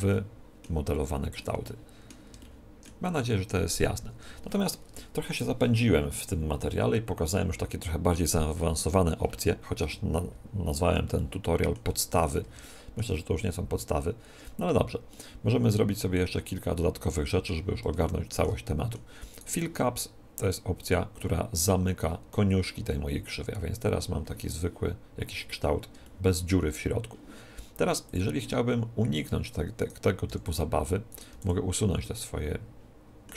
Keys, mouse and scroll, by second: 4.1 Tab, 4.4 middle click, 4.9 middle click, 9.7 KP_1, 11.1-14.3 middle drag, 15.0-16.8 middle drag, 17.9-20.2 middle drag, 19.3-21.1 right drag, 20.7-22.5 drag, 22.5-27.8 middle drag, 28.0-29.9 drag, 29.7-32.7 right drag, 30.2 x, 31.2 x, 31.9-33.3 middle drag.